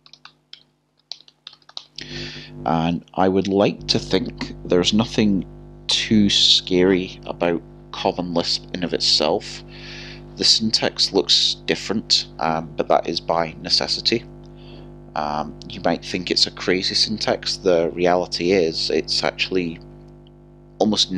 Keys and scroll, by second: 0.9 typing.